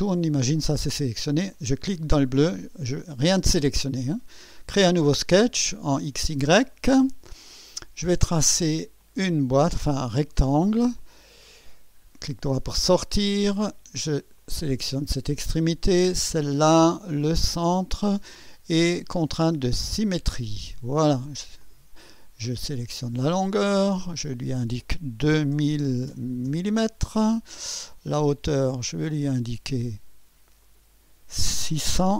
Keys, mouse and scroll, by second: 0.1 click, 1.5 click, 4.8 click, 6.7 click, 9.0 click, 9.9 click, 11.0 click, 11.5 right click, 12.8 right click, 14.4 click, 16.2 click, 17.7 click, 19.7 click, 21.0 right click, 21.6 click, 22.9 click, 24.1 click, 25.3 2, 25.5 0, 26.5 Return, 29.2 click, 30.6 click, 32.0 6.